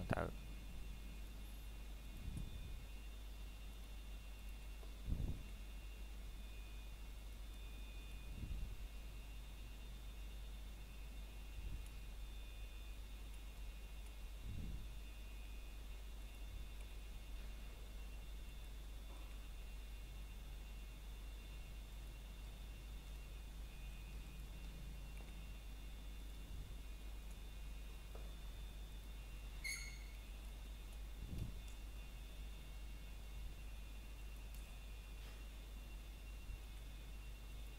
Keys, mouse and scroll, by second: 0.0 click, 0.3 scroll down 1, 0.6 shift+middle click, 1.0 scroll up 1, 2.1 e, 3.9 click, 4.9 s, 6.9 click, 9.6 s, 11.0 click, 11.4 scroll up 1, 12.4 click, 16.9 scroll up 1, 17.8 s, 18.7 click, 24.7 scroll down 1, 25.4 middle click, 25.9 scroll up 1, 26.8 middle click, 27.1 scroll up 1, 27.5 shift+middle click, 31.9 scroll down 1, 33.6 click.